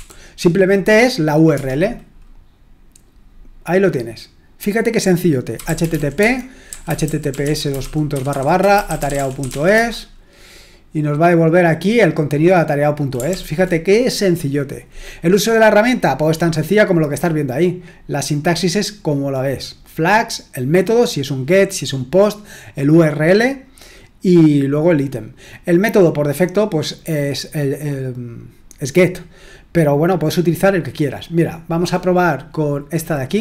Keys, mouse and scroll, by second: 0.0-0.4 typing, 1.5 Return, 5.3-9.9 typing, 13.3 ctrl+l, 15.6-16.4 scroll down 2, 16.4-17.7 scroll up 1, 17.9-19.3 scroll down 2, 23.8-24.7 scroll down 1, 26.0-31.1 scroll down 2, 31.1 click, 31.6 click.